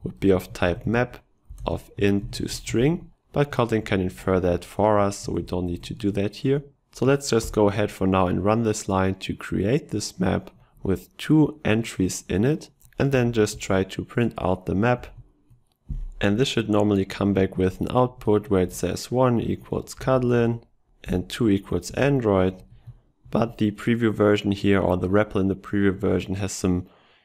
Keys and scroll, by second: 3.8 ctrl+shift+Left, 23.3 ctrl+x.